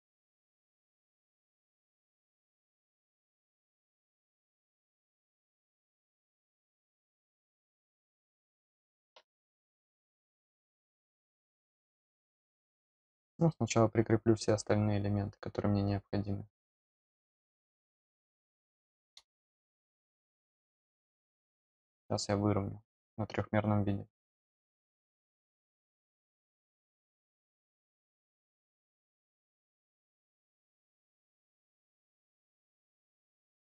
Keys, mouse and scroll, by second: 8.0 click, 10.0 middle click, 10.9 scroll up 1, 13.0-14.3 drag, 20.5 click, 21.4 middle click, 21.4 scroll up 1, 21.7 scroll down 1, 24.0 scroll down 1, 24.3 scroll up 1, 27.2 click.